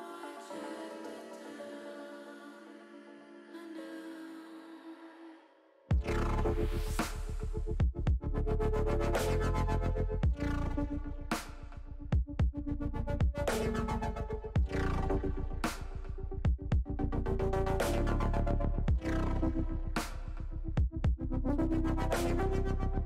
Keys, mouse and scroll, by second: 1.5 middle click, 2.4 s, 4.3 click, 4.9 middle click, 5.9-8.0 middle drag, 8.4 click, 9.6 s, 10.6 click, 11.0-13.4 middle drag, 15.1 shift+middle click, 15.5 middle click, 16.8 middle click, 18.8 middle click, 19.8 KP_1.